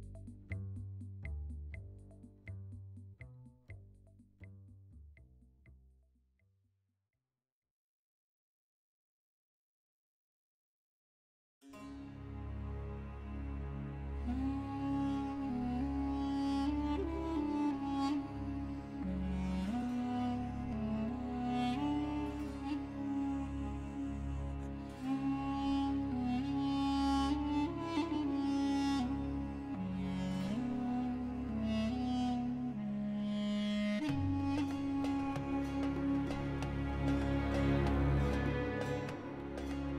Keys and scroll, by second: 0.2 Escape, 3.3 shift+d, 3.7 Escape, 4.2 p, 4.6 Tab, 6.1 Tab, 8.0 s, 12.7 s, 13.1 x, 17.7 x, 18.4 s, 19.0 x, 24.2 2, 26.0 ctrl+x, 29.5 ctrl+r, 29.8 7, 30.1 Return, 34.8 3, 36.3 g, 37.0 Escape, 37.5 g.